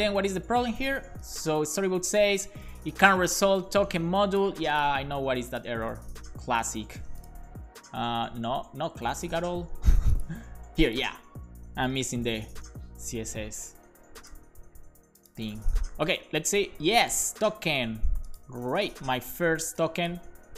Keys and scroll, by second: 11.8-12.9 typing.